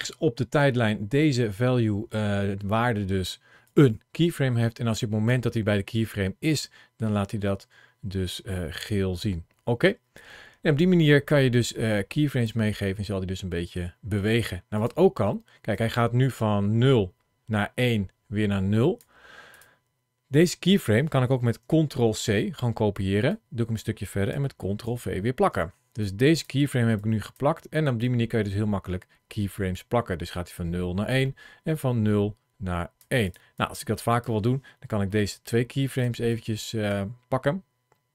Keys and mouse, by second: 3.5-5.1 drag, 8.6-12.3 drag, 12.7 middle click, 14.6 click, 15.6-18.8 drag, 20.1 click, 21.7 ctrl+c, 23.1 click, 24.7 ctrl+v, 25.9 click, 26.9 click, 27.9-32.8 drag, 33.1 click, 33.4 click, 35.0 shift+middle click, 36.2 click.